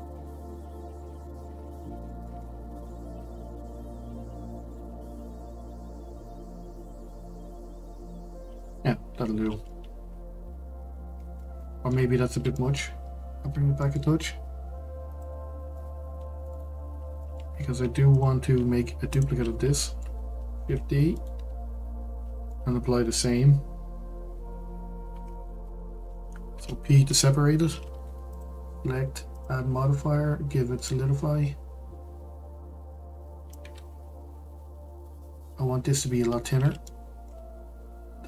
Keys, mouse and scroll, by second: 0.1-0.5 scroll up 2, 0.5-1.5 middle drag, 1.5-2.1 scroll up 3, 2.1-4.0 shift+middle drag, 4.0 g, 7.0-9.2 middle drag, 9.2-9.6 scroll down 4, 9.6-12.0 middle drag, 12.0-12.5 scroll up 2, 12.5 middle click, 12.9-13.3 scroll up 1, 13.3 g, 15.4-15.7 scroll down 2, 15.7-17.5 middle drag, 17.5-18.1 scroll up 1, 18.1 click, 19.1 shift+click, 19.7 shift+middle click, 20.6 shift+d, 22.5 middle click, 23.3-25.7 scroll up 1, 26.5 p, 28.0 Tab, 28.3 click, 30.8-32.4 drag, 33.5-36.5 drag, 36.8-37.4 middle drag, 37.4-38.2 scroll up 2.